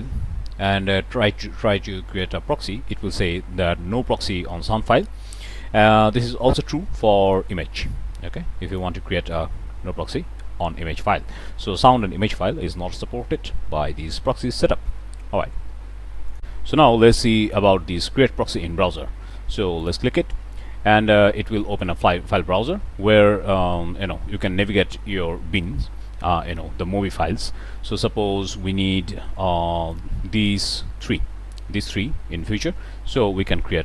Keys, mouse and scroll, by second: 6.3 click, 7.2 click, 8.6 click, 12.8 middle click, 12.9 scroll up 2, 16.2 click, 19.8 click, 21.6 click, 29.8 shift+click, 30.3 shift+click, 30.9 shift+click.